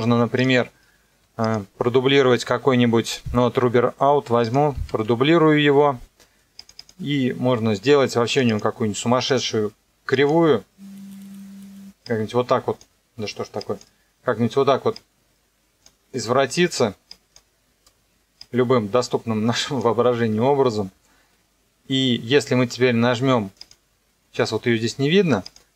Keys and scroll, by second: 4.7 ctrl+d.